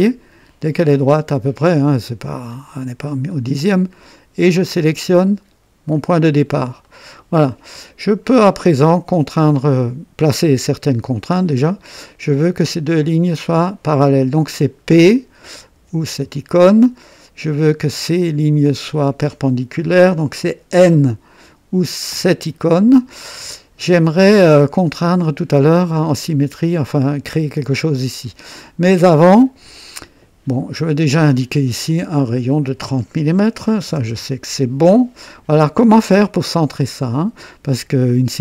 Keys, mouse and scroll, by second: 2.5 click, 5.9 click, 6.8 right click, 7.8 right click, 7.8 click, 8.7 right click, 9.4 right click, 12.3 click, 13.5 click, 15.7 p, 17.8 click, 18.9 click, 22.1 n, 24.3-26.4 drag, 27.1-30.0 drag, 31.1 click, 32.2 click, 33.5 KP_3, 33.8 KP_0, 34.1 KP_Enter, 36.8-38.1 drag.